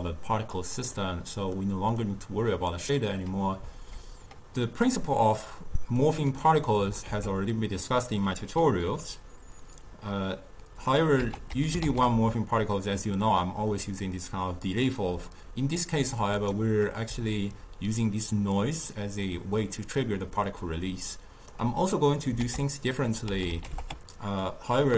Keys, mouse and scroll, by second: 0.1 click, 1.0-2.1 middle drag, 2.1 click, 3.1 middle click, 6.1-7.2 drag, 7.2 ctrl+a, 17.4-20.5 shift+drag, 22.0 middle click, 22.5 ctrl+a.